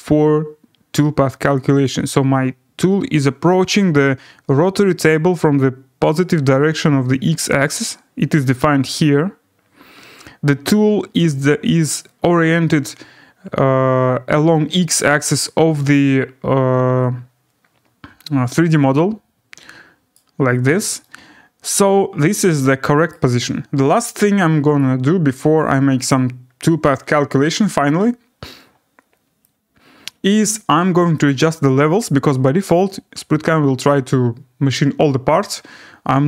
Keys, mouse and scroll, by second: 11.9 right click, 12.3 middle click, 12.7 scroll down 4, 15.4 right click, 17.5 scroll, 20.1 right click, 20.3-21.0 scroll, 23.1 right click, 24.8 click, 25.3 scroll, 26.1 right click, 26.4-28.1 scroll, 30.5 click, 31.2 click, 31.4 scroll, 35.5 scroll.